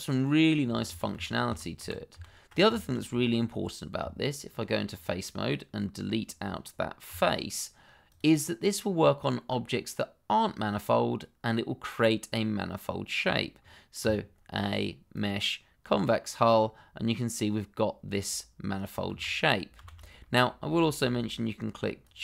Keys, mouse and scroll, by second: 0.2-0.6 scroll up 1, 2.7 shift+middle click, 2.8 middle click, 3.1-3.4 scroll up 1, 3.4 middle click, 4.0 Tab, 4.9 click, 7.0 x, 8.0 click, 8.4 middle click, 14.0 a, 15.1 click, 16.7-17.0 scroll down 1, 17.0 middle click, 19.1 shift+z, 20.2 middle click, 22.0 click.